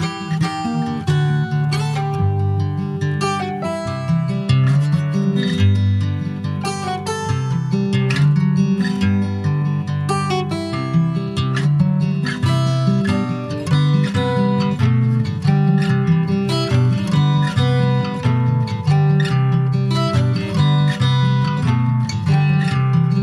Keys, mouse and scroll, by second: 1.3 middle click, 1.6 scroll down 2, 1.9 shift+middle click, 2.2 scroll down 2, 2.3 middle click, 2.7 e, 4.0 shift+middle click, 4.7 ctrl+s, 4.9 alt+middle click, 5.3-5.6 alt+scroll up 1, 5.6 shift+middle click, 6.1 alt+z, 6.7 click, 9.7 alt+z, 10.0-11.3 middle drag, 11.3 click, 11.9 l, 12.6 alt+middle click, 13.6 shift+middle click, 13.9 alt+z, 14.4 shift+middle click, 14.6-15.0 shift+scroll up 4, 15.0 s, 17.0-17.9 scroll up 1, 17.9 click, 20.0-20.5 scroll down 1, 20.5 alt+z, 20.7 click, 21.2 middle click, 21.8 Tab, 21.9 click, 22.3 middle click, 22.8 ctrl+s, 22.8 click.